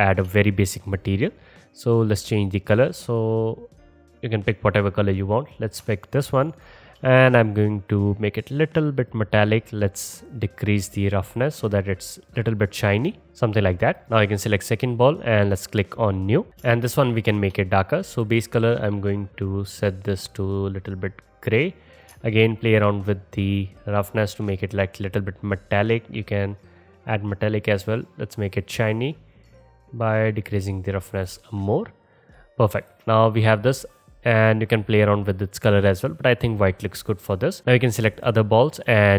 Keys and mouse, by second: 2.2-5.6 drag, 5.6 middle click, 8.4-11.7 middle drag, 12.2-14.0 drag, 14.0 middle click, 14.2-16.1 drag, 16.1 middle click, 16.5 ctrl+z, 16.5 shift+click, 17.2-18.2 alt+shift+drag, 18.2 middle click, 18.4-19.6 drag, 19.6 middle drag, 19.8-22.0 drag, 22.0 middle click, 22.0-23.6 alt+shift+drag, 23.6-27.5 middle drag, 27.5-29.5 drag, 29.5-33.0 middle drag, 33.1-39.1 drag.